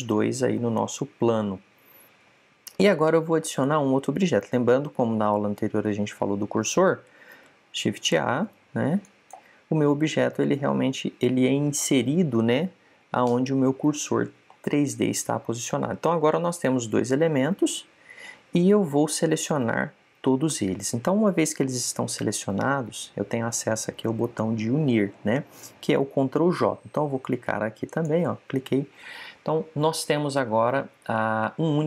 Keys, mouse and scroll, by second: 1.7-3.7 middle drag, 8.2 shift+a, 15.4-17.2 middle drag, 20.1 a, 20.5 a, 28.7 click.